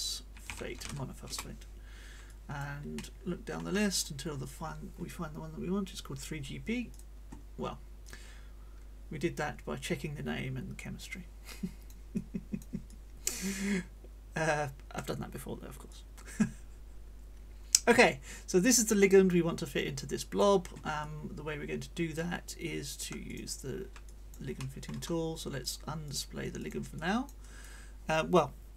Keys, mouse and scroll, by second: 0.0-1.2 typing, 1.3 Return, 2.3 click, 2.9 click, 3.9-4.2 scroll up 1, 5.7 scroll up 1, 6.9 click, 8.0-11.1 drag, 11.5 click, 12.2 click, 12.9-15.1 drag, 15.9-20.5 drag, 21.0-22.3 drag, 23.3 click, 24.0 click, 25.6 click, 26.1 click, 26.6 click, 27.4 click, 27.4 right click.